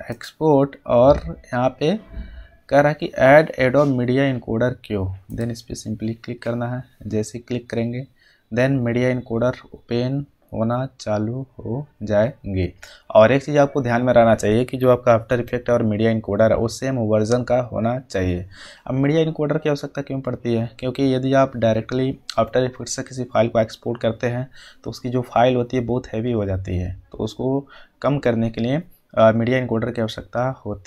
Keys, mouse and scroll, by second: 5.3 click.